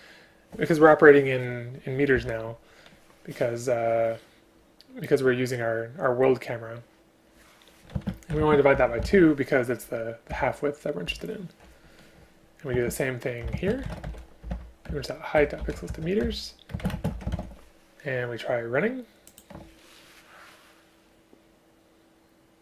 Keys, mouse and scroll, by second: 2.2 Return, 8.0 space, 8.5 space, 10.3 End, 11.1 Left, 12.8 space, 13.6 space, 14.9 Return, 16.3 Return, 16.8 space, 17.0 space.